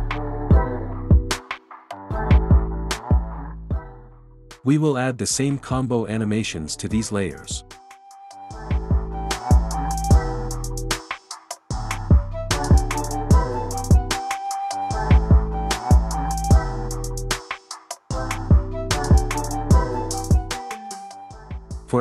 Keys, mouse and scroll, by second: 1.6 click, 5.0 click, 7.0 click, 9.4 click, 10.9 click, 13.8 click, 14.9 space, 20.6 space, 21.7 click.